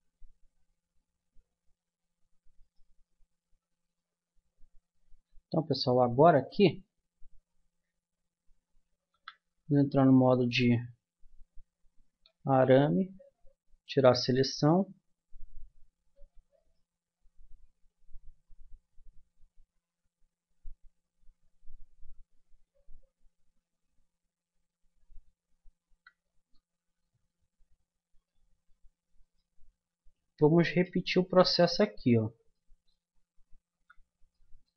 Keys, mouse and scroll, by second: 2.0 Tab, 2.7-4.4 drag, 5.0 Tab, 5.0 click, 5.6 Tab, 9.1 z, 10.8-13.5 middle drag, 13.5 a, 16.5-17.8 right drag, 17.8-19.2 middle drag, 21.0-23.9 middle drag, 22.3 a, 25.6 middle click, 26.5 Tab, 29.2 click, 31.8-33.7 middle drag, 33.7 z.